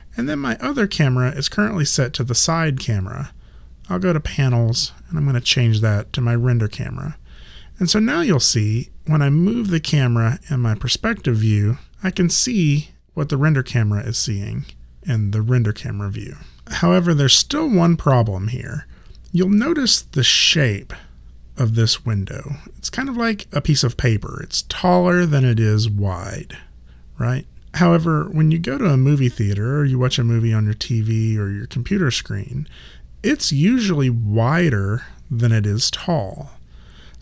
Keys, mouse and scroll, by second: 4.3 click, 8.8 click.